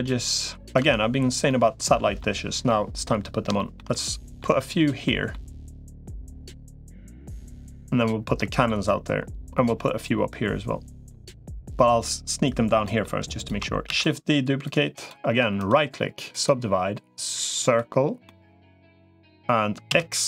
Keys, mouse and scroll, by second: 0.6 Tab, 1.3 middle click, 2.5 middle click, 3.4 shift+middle click, 3.7 middle click, 4.9 middle click, 7.3 middle click, 8.2 middle click, 10.9 middle click, 12.6 middle click, 13.2 click, 13.8 shift+d, 14.4 click, 15.6 right click, 18.0-19.2 middle drag, 19.8 x.